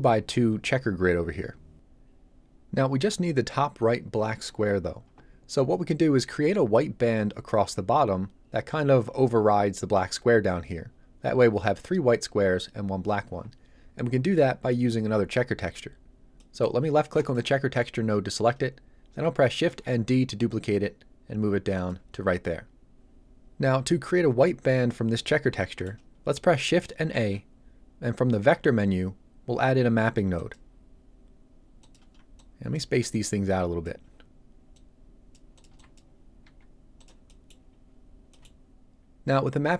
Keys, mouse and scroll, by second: 16.4 middle click, 17.1 click, 19.6 shift+d, 21.7 click, 25.5 middle click, 27.1 shift+a, 30.3 click, 34.0 scroll down 1, 34.7 click, 35.6 b, 35.7 click, 36.1 scroll down 2, 36.2 click, 36.4 g, 36.9 click, 37.2 middle click, 37.7 scroll up 1, 38.3 middle click.